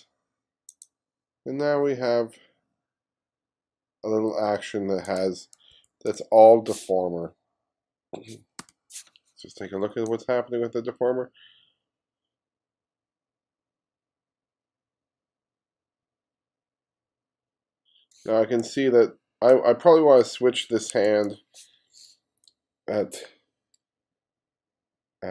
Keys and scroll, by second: 5.8 2, 8.7 m.